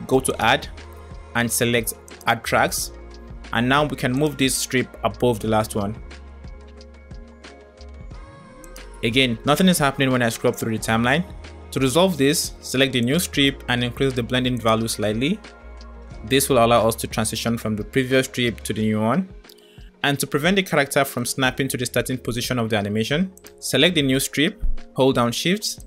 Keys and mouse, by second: 2.8 click, 4.0 click, 4.5 g, 6.3 middle click, 8.8-11.6 drag, 12.8 click, 14.4 click, 16.0-22.8 drag, 23.4 click.